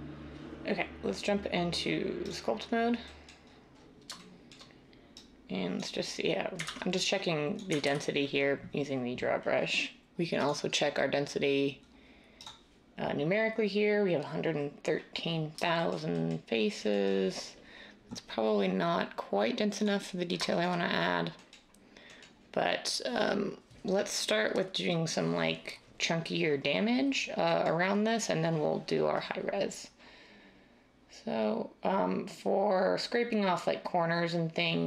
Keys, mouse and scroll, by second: 6.6 ctrl+z, 7.8 ctrl+z.